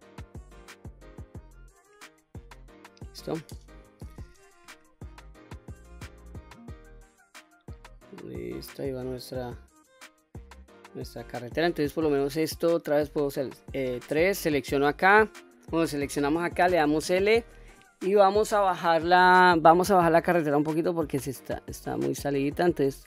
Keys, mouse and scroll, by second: 1.9-2.7 scroll down 2, 3.8 alt+h, 4.9-11.1 middle drag, 11.9 click, 13.2 3, 13.6 click, 16.4 l, 18.3-20.2 middle drag, 20.2-22.9 drag.